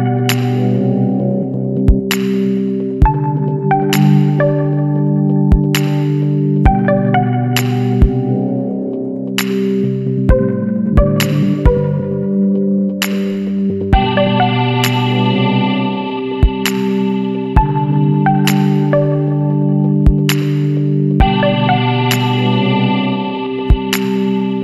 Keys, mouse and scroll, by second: 0.2 click, 1.8 click, 3.5 Escape, 4.3 click, 6.0 click, 7.2 KP_5, 7.5 KP_Enter, 9.6 click, 11.3 click, 12.5 KP_1, 12.8 KP_2, 13.1 KP_0, 13.4 KP_Enter, 16.0 click, 19.4 click, 20.5 click, 21.7 click, 23.4 click.